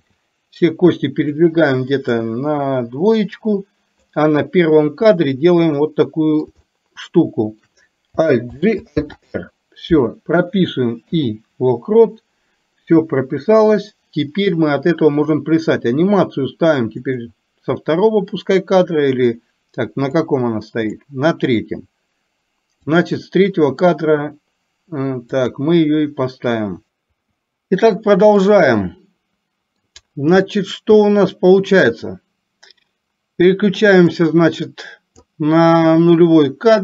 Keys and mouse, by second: 0.1 g, 2.3-4.3 drag, 5.9 middle click, 6.8 shift+middle click, 7.3 shift+middle click, 8.6 alt+g, 9.0 alt+r, 11.1 i, 20.3 click, 22.9 click, 25.5 click, 28.4-29.8 middle drag, 30.6-31.9 middle drag, 34.2-35.3 drag.